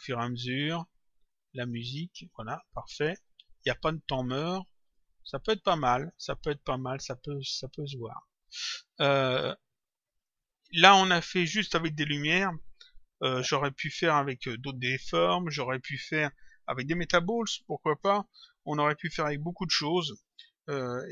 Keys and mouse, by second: 4.8 click, 8.3 click, 10.1 click, 12.5 click, 13.8 click, 16.4 click, 20.9 click.